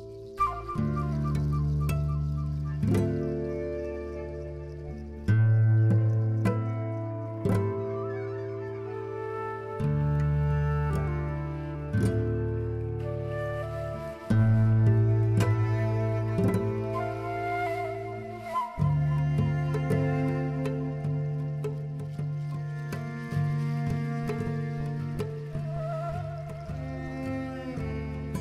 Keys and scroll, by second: 4.3 t, 6.8 b, 9.0 e, 14.6 f, 23.5 z, 25.4-27.2 typing.